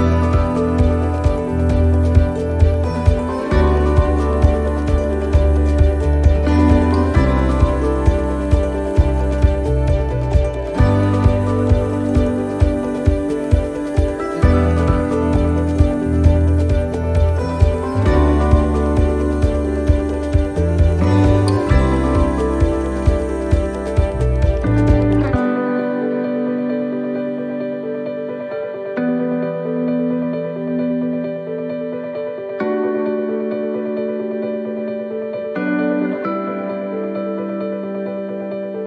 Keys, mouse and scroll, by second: 1.0 middle click, 1.0 scroll down 1, 1.5 middle click, 1.8-2.3 scroll up 3, 2.4 middle click, 3.0 right click, 4.2 click, 4.6 scroll down 2, 5.0 middle click, 6.1 right click, 6.5 shift+right click, 7.4 right click, 7.6-14.8 shift+right click, 14.8 middle click, 16.2 shift+middle click, 16.7 scroll up 1, 16.8 middle click, 17.5 shift+middle click, 19.4 shift+right click, 20.9 middle click, 23.1 shift+right click, 23.9-28.5 shift+right click, 28.5 middle click.